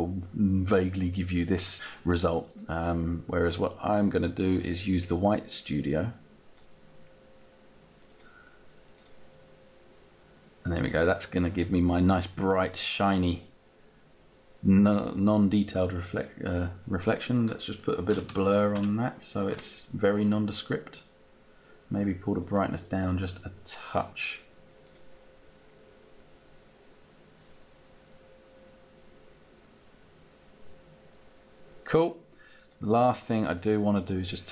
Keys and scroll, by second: 19.0 Down.